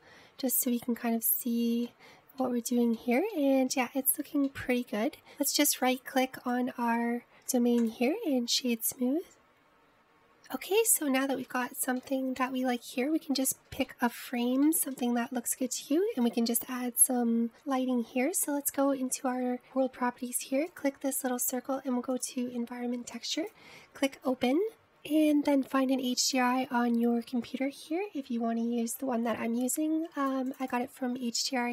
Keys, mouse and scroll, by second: 2.9-6.9 middle drag, 6.9 click, 7.3-11.9 right drag, 11.9-12.7 scroll up 1, 12.7-13.5 shift+middle drag, 13.5-14.6 scroll down 1, 14.6-18.4 shift+middle drag, 18.5 click, 21.8-24.7 drag.